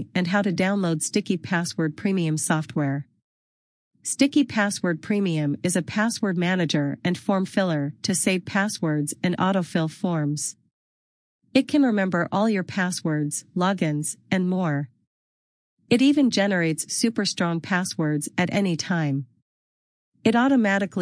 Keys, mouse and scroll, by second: 10.4 click, 15.1 click.